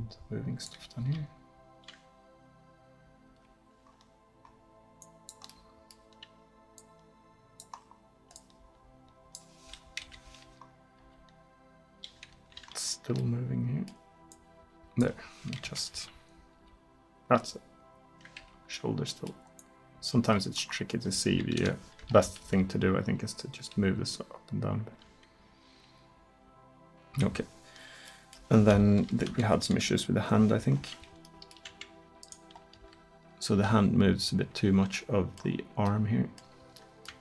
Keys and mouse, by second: 1.1 r, 4.3-7.9 middle drag, 7.9-10.1 drag, 10.1 KP_3, 11.0 r, 15.7 KP_3, 16.6 r, 19.6-21.3 middle drag, 21.3 click, 21.6 KP_3, 22.5 r, 29.3 KP_1, 29.8 KP_7, 32.8 r, 35.4 middle click.